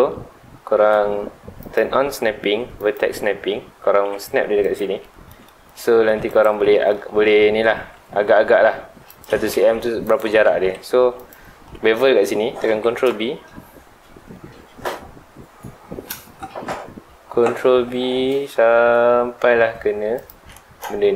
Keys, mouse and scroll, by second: 1.6-3.9 drag, 3.9 g, 4.7 ctrl+click, 5.0-6.3 middle drag, 6.3 click, 6.7-7.1 middle drag, 7.1 Tab, 7.3 scroll up 2, 7.6 Tab, 7.9-9.1 middle drag, 9.1 click, 9.5 Tab, 10.0 click, 10.4 Tab, 10.9 3, 11.2 click, 11.5-12.1 scroll down 3, 11.7 middle click, 12.1-12.7 scroll up 2, 12.7 ctrl+b, 20.3 click, 20.5-21.1 middle drag.